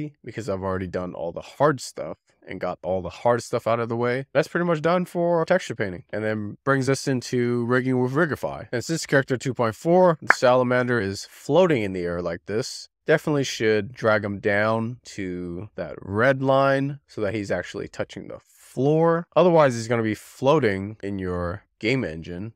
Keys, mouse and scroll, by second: 0.4 click, 1.8 scroll down 9, 1.9 middle click, 2.6 scroll down 1, 2.8 scroll up 1, 2.8 alt+z, 3.1 alt+z, 3.3 scroll down 1, 3.6 shift+middle click, 3.8 click, 4.2 scroll up 3, 6.5 s, 8.5-9.1 scroll up 2, 10.0 click, 11.1 click, 13.1 click.